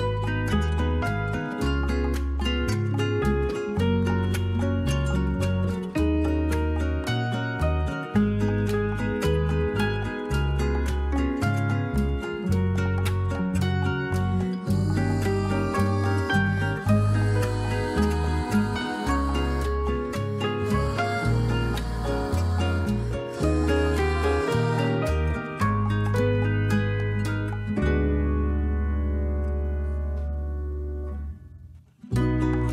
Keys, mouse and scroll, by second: 9.7-12.1 drag, 14.0 middle drag, 16.1 middle click, 19.1-22.2 middle drag, 28.3 click, 28.9 middle drag, 29.1 middle click, 29.3 middle click, 29.6-31.8 middle drag.